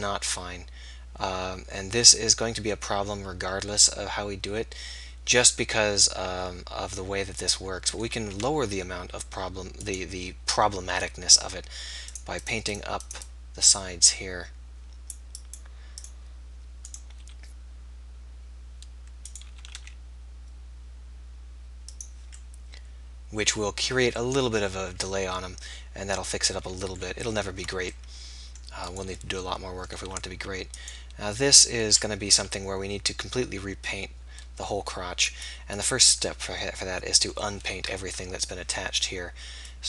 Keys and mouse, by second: 0.2 middle click, 8.3 ctrl+z, 11.5 click, 12.1-18.7 drag, 17.3 r, 19.7 r, 22.0-23.8 drag, 27.4 ctrl+z, 30.0-31.9 drag, 30.0 r, 31.9 KP_3, 32.3 r, 33.0-35.1 drag, 36.9-39.8 middle drag.